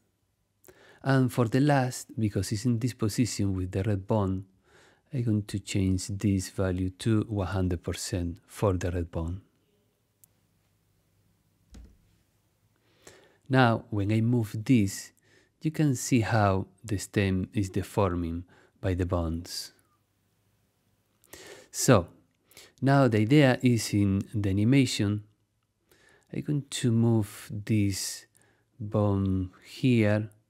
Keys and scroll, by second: 6.7 i, 7.1 0, 12.4 Escape, 22.7 super+z.